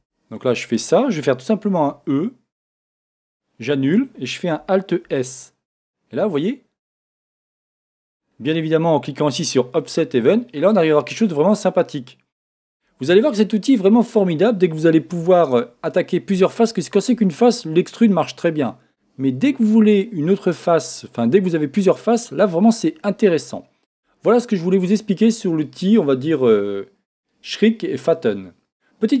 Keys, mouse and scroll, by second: 0.0 z, 1.8 e, 3.4 right click, 5.1 alt+s, 8.2 click, 10.0 click, 10.5-26.5 middle drag, 26.5-29.2 drag.